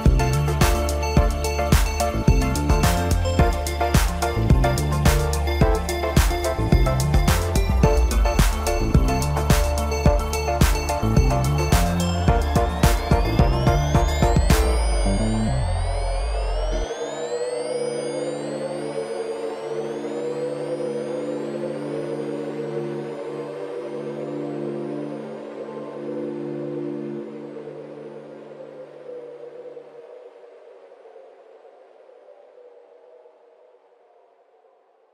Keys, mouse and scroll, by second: 1.5-2.0 middle drag, 2.0 scroll up 1, 2.3 scroll down 1, 2.4-3.1 middle drag, 3.1 click, 3.4-3.7 scroll up 1, 3.7 middle click, 4.6 click, 5.9 drag, 7.9 drag, 8.8 click, 9.3-9.7 scroll up 1, 10.1 Tab, 12.0 click, 12.5-13.7 middle drag, 13.8 click, 15.2 KP_1, 16.5 click, 16.9-17.7 scroll up 2, 17.7 Tab, 18.1 click, 19.0 Tab, 19.7 middle click, 20.6 click, 21.8 l, 23.4 click, 24.3 click, 24.9-25.7 scroll down 2, 25.9 click, 26.4-27.6 scroll down 1, 27.6 KP_1, 30.7 ctrl+KP_3, 32.8-35.1 middle drag.